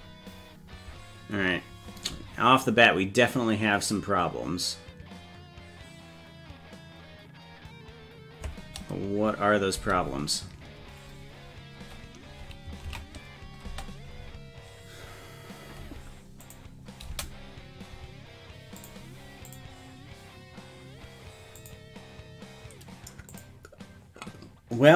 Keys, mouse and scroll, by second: 9.8 space, 13.1 ctrl+s, 13.7 space, 16.5 click, 17.1 space, 18.8 click, 19.5 click, 21.6 click, 23.3 click.